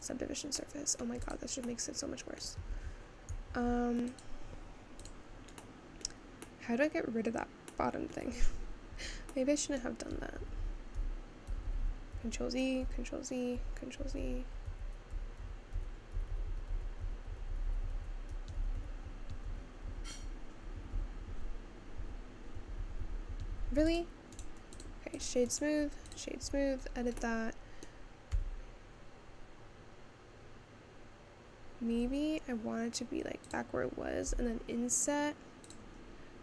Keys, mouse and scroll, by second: 0.0 click, 0.7 middle click, 1.3 click, 1.8 middle click, 2.8 ctrl+z, 3.8 ctrl+z, 4.2 click, 5.1 click, 5.8-7.1 middle drag, 7.1-7.8 scroll down 1, 7.8 middle click, 8.4 Tab, 9.1 Tab, 9.4-10.8 middle drag, 10.8 ctrl+z, 11.1-12.9 ctrl+z, 24.0 click, 24.8 right click, 25.2 click, 26.1 right click, 26.5 Tab, 26.8 scroll up 2, 27.2-28.4 middle drag, 28.4 s, 36.0-36.4 scroll down 3.